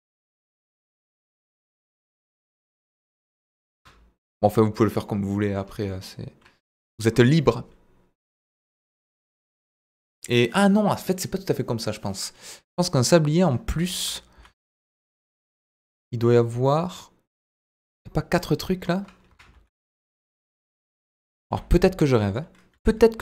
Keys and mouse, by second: 0.6 click, 1.1 s, 2.3 shift+z, 3.7 click, 3.8 Tab, 5.0-5.5 middle drag, 5.9 middle drag, 6.7 KP_1, 14.3 s, 14.6 shift+z, 15.9 click, 16.3-17.6 middle drag, 19.3 KP_1, 19.5 shift+a, 21.4 s, 22.2 click, 22.7 g, 22.8 middle click.